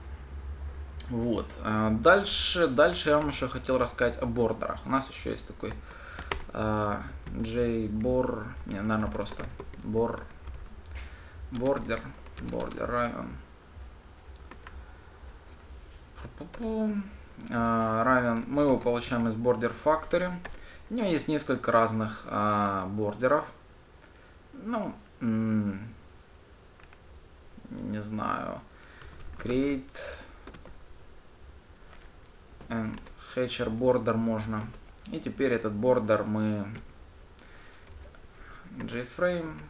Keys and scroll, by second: 12.6 Return, 16.4 alt+Return, 20.8 Return, 33.4 Return, 39.2 Return.